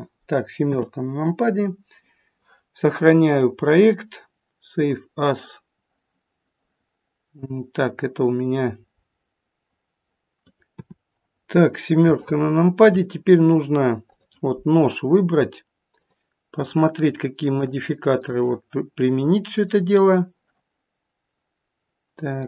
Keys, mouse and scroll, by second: 0.6 KP_7, 1.6-2.2 scroll down 2, 3.2 click.